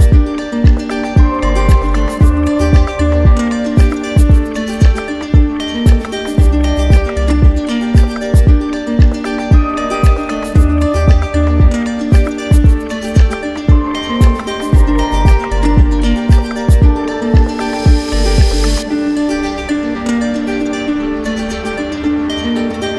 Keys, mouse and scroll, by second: 0.2 shift+click, 0.8 shift+click, 1.4 right click, 1.7 shift+click, 2.5 alt+click, 2.7 alt+click, 3.3 right click, 3.9 shift+click, 4.2 shift+click, 4.3 shift+click, 4.6 shift+click, 4.9 shift+click, 5.2 shift+click, 5.6 shift+click, 6.0 shift+click, 6.3 shift+click, 6.5 shift+click, 7.1 click, 7.9 alt+click, 8.6 click, 9.1 shift+click, 9.9 alt+click, 11.2 click, 11.8 shift+click, 12.7 alt+click, 13.7 alt+click, 15.5 right click, 16.1 z, 16.9 click, 18.0 right click, 18.8 right click, 20.2-21.3 drag, 21.9-22.9 drag.